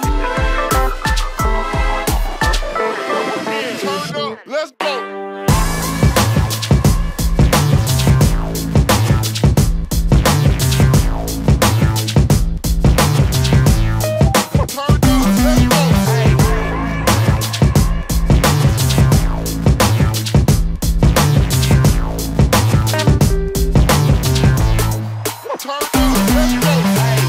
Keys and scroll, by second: 9.2 Delete, 17.6 ctrl+z, 24.5 Delete.